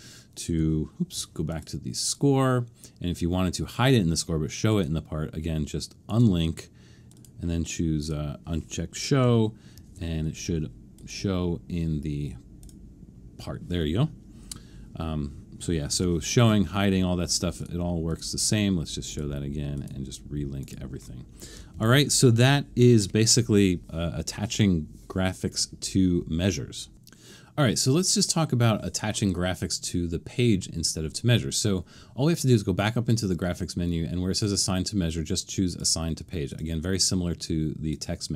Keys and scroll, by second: 9.7 alt+super+/, 15.9 alt+super+/, 21.7 super+-.